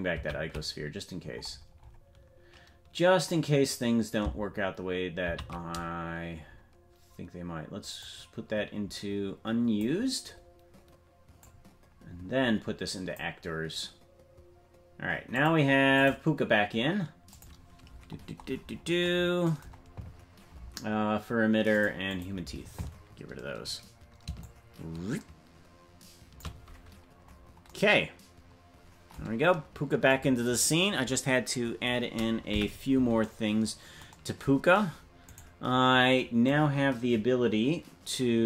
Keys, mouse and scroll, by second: 1.2 scroll down 2, 5.8 ctrl+z, 5.8-6.4 scroll down 13, 6.4-8.0 scroll down 1, 8.0-17.8 drag, 8.0-10.5 scroll down 1, 15.3 scroll up 4, 17.8-18.1 scroll down 1, 18.4-19.0 scroll down 13, 21.7 click, 27.2-30.1 scroll up 4, 30.1-32.7 drag, 35.4 right click.